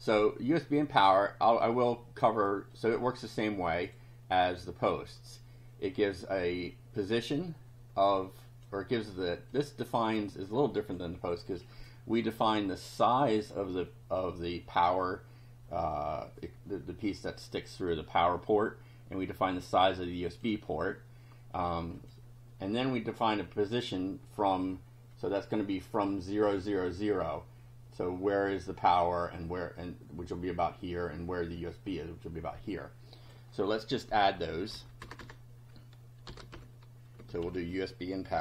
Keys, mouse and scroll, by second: 2.7-4.1 drag, 7.0-8.8 drag, 9.5-11.1 drag, 19.7 click, 22.0 click, 23.2 click, 25.2 click, 33.2 click, 34.8 Down, 35.1 Return, 36.1-38.4 typing.